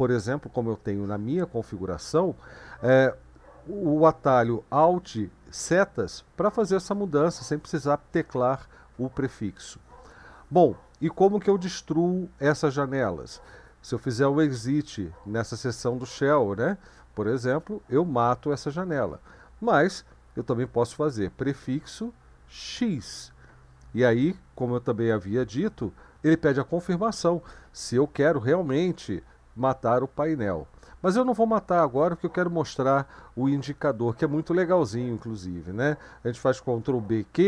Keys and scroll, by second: 13.9-16.3 typing, 17.5 Return, 21.5 ctrl+b, 22.7 x, 32.0 n, 36.8 ctrl+b, 37.3 q.